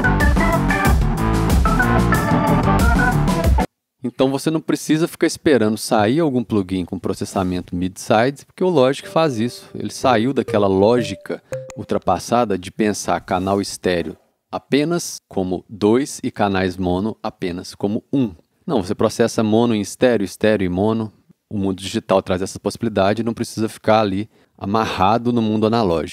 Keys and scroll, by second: 3.5 space, 4.5 c.